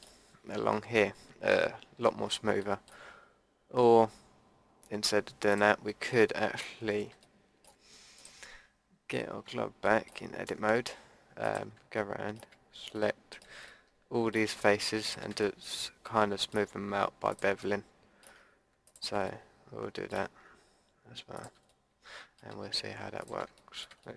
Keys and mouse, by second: 2.1 a, 2.7-5.3 drag, 5.5-6.3 drag, 6.3-7.4 middle drag, 8.1-9.2 middle drag, 9.4 Tab, 12.1 click, 12.6 middle click, 13.3 click, 14.1 middle click, 15.0 click, 15.5 middle click, 15.7 click, 16.1-21.3 middle drag, 21.7-23.2 middle drag, 23.6 middle click, 23.8-24.1 drag.